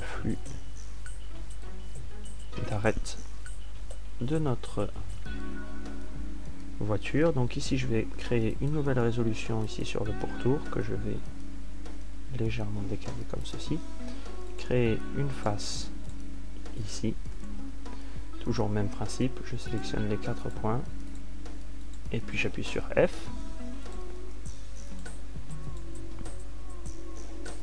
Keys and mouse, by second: 9.6 ctrl+r, 12.4 g, 15.0 click, 19.2 f, 20.4 a.